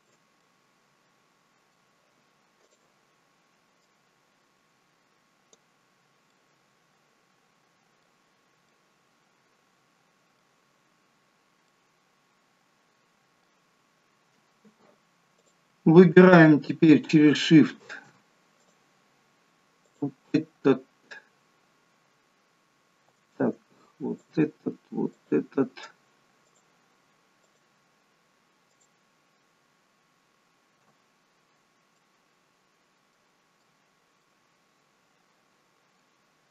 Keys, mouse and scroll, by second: 0.3 middle click, 2.6 click, 3.7 click, 5.9 scroll down 3, 6.2 middle click, 8.3-8.7 scroll up 3, 8.7 middle click, 10.7 scroll down 1, 11.6 middle click, 15.4 click, 18.6 click, 19.8 alt+shift+click, 24.0 alt+shift+click, 31.9 middle click, 33.6 middle click.